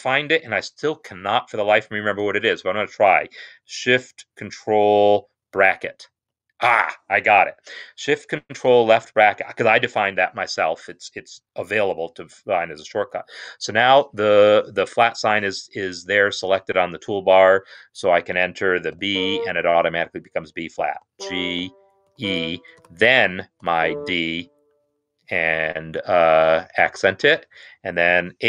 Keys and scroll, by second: 6.1 ctrl+shift+[, 19.0 b, 21.0-23.6 typing, 26.0 shift+v, 27.9 4.